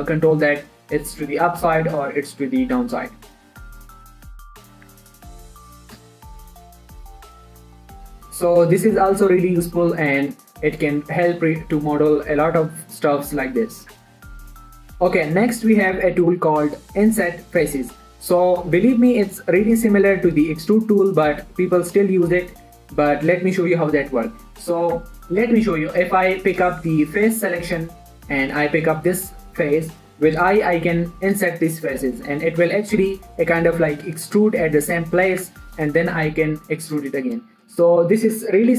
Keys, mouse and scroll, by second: 0.3 scroll down 1, 0.4 middle click, 1.9-4.4 drag, 4.4 middle click, 5.3 Tab, 5.4 scroll down 1, 5.5 middle click, 6.3 scroll up 1, 6.8 ctrl+a, 7.5 click, 7.7 scroll down 1, 8.0-9.7 scroll up 1, 10.9 shift+Num_Lock, 10.9 right click, 10.9 shift+middle click, 12.2 middle click, 13.9-14.5 scroll down 1, 14.5 middle click, 24.4 middle click, 25.4 Tab, 26.3 click, 31.4 i, 36.2 click, 36.6 e, 37.3 click, 37.7 scroll down 1, 37.8 middle click, 38.4 click.